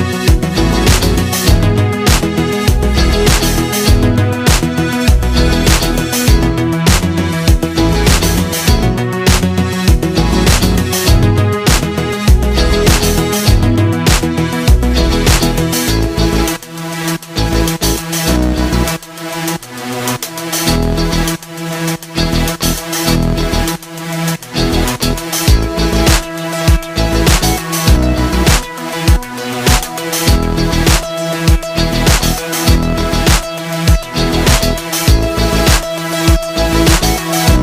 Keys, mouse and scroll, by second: 4.6-16.3 drag, 19.4-28.7 drag, 28.8-37.6 drag.